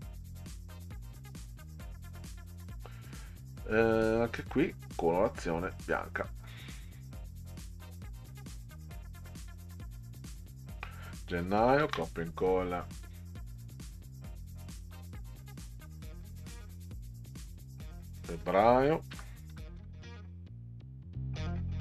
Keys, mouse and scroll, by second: 1.9 click, 4.5 click, 4.8 click, 6.5 click, 7.7-8.1 middle drag, 9.3-10.7 drag, 11.6 ctrl+v, 11.8 ctrl+v, 14.5 click, 14.7 click, 17.9 click, 18.9-20.3 typing, 21.3 click, 21.5 click.